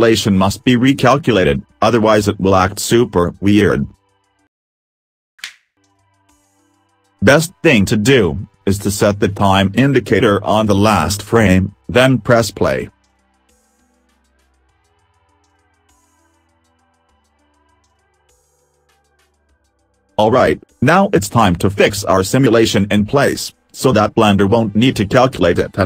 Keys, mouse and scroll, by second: 0.0-1.2 scroll up 2, 3.1 right click, 5.7 middle click, 5.7 scroll down 5, 9.5 right click, 12.9 click, 20.1 click.